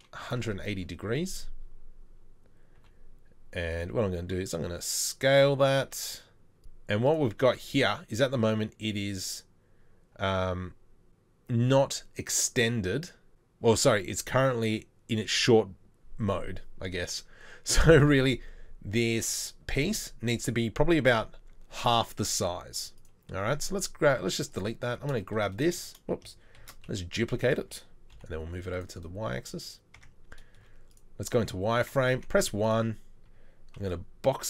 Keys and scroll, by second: 2.8 r, 4.2 r, 4.3 s, 23.4 Delete, 24.9 Tab, 25.8 Tab, 26.6 shift+d, 30.0 Tab, 30.6 Tab, 30.6 z, 32.2 1, 33.8 b.